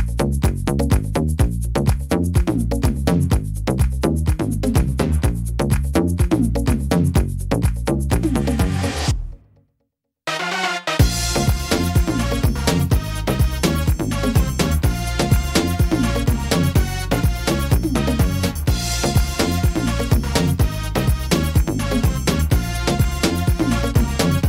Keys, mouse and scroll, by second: 0.0 shift+right click, 1.4 e, 3.2 middle click, 3.8 ctrl+z, 4.4 shift+right click, 5.4 e, 6.5 middle click, 7.3 shift+middle click, 7.9 middle click, 11.0 middle click, 12.0 scroll up 2, 12.4 middle click, 13.0 shift+middle click, 13.5 scroll up 1, 14.1 right click, 15.2 click, 16.4 middle click, 17.5 middle click, 18.5 right click, 19.4 click, 20.8 right click, 21.8 click, 23.6 ctrl+r.